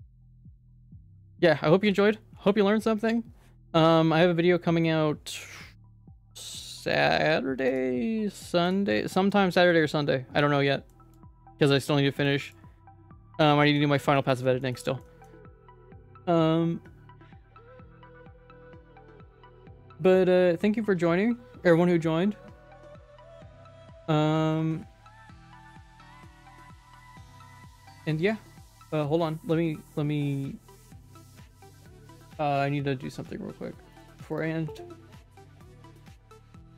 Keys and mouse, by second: 1.0 middle click, 1.9 ctrl+s, 2.2 middle click, 10.9 middle click, 11.6 middle click, 12.3 middle click, 13.3 shift+middle click, 14.0 middle click, 14.3 shift+middle click, 14.6 shift+middle click, 15.0 shift+middle click.